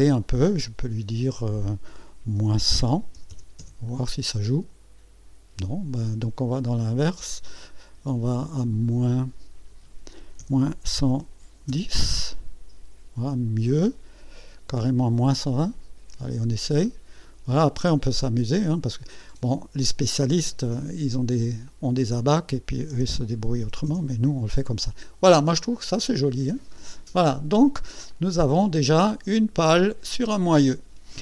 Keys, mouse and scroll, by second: 1.1 click, 3.1 KP_Subtract, 3.3 KP_1, 3.4 KP_0, 4.6 KP_Enter, 6.5 click, 8.1 click, 9.2 click, 11.4 KP_Subtract, 11.5 KP_1, 11.7 KP_0, 12.0 KP_Enter, 16.8-17.7 drag, 19.8 click, 21.7 click, 22.9 BackSpace, 23.6 KP_2, 23.9 KP_Enter, 28.1-31.2 drag.